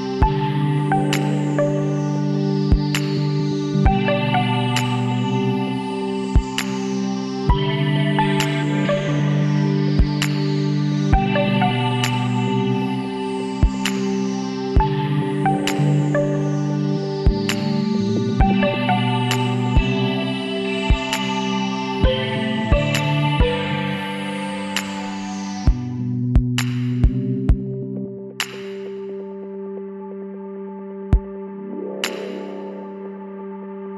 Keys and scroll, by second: 13.3-14.3 typing, 14.8 ctrl+s.